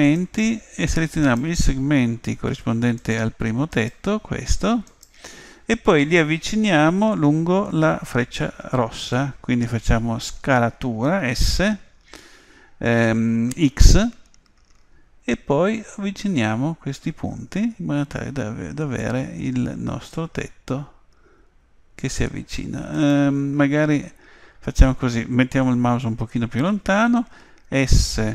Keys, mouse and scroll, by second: 0.1 click, 1.2-6.7 right drag, 11.8 s, 27.7 s.